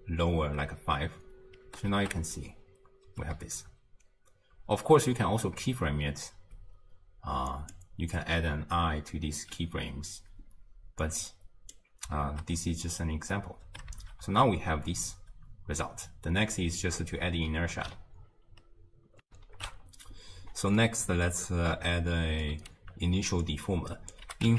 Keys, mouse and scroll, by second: 0.7 space, 1.7 space, 3.1 space, 3.7 space, 4.6 space, 7.5 drag, 11.1 drag, 12.3 shift+space, 13.6 space, 14.3 space, 15.2 space, 19.2 ctrl+alt+shift+w, 19.4 ctrl+alt+shift+q, 21.3-22.7 middle drag, 22.7-23.4 scroll down 2, 23.4 click, 24.3 g.